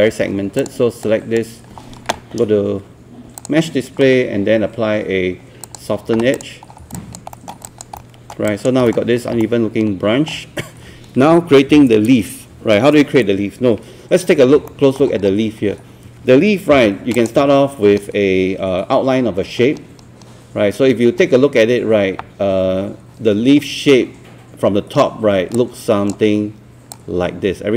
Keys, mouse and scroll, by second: 0.6 click, 1.0 right click, 3.4 click, 7.0 alt+click, 7.6 alt+click, 8.0 alt+middle click, 8.5 alt+click, 8.9 alt+middle click, 9.4-14.1 alt+middle drag, 14.1 scroll up 1, 14.7 alt+middle click, 15.3 scroll up 1, 16.8 ctrl+1, 17.1-27.7 drag.